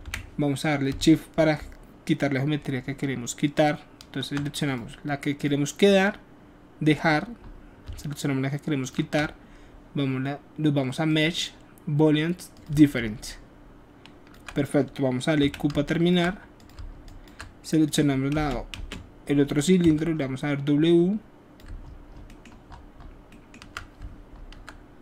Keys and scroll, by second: 15.4 q, 18.3 space, 18.7 space, 19.8 w.